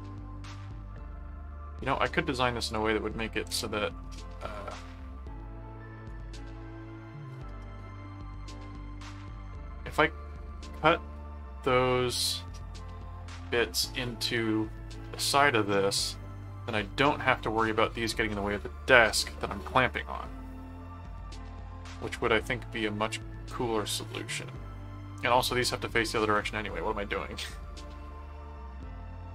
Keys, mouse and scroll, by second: 0.1 middle click, 1.0 middle click, 2.7 click, 4.8-9.5 middle drag, 26.3 middle click, 27.4 middle click.